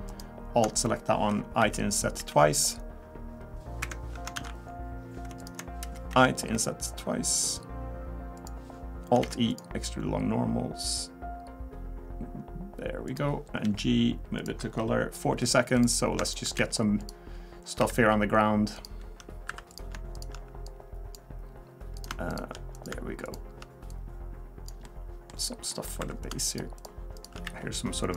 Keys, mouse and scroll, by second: 0.1 alt+click, 1.6 i, 4.3 ctrl+z, 5.4 alt+click, 6.1 i, 9.2 alt+e, 13.6 g, 15.4 click, 15.8 click, 16.3 shift+click, 16.6 e, 17.8 e, 19.5 2, 19.7 click, 20.2 shift+click, 20.6 click, 22.0 click, 22.3 shift+click, 22.7 click, 23.2 shift+click, 23.9 click, 24.8 middle click, 25.4-25.7 scroll down 2, 25.7 middle click, 26.0 3, 26.2 click, 26.5 shift+click, 26.8 shift+click, 27.3 shift+click, 27.4 e.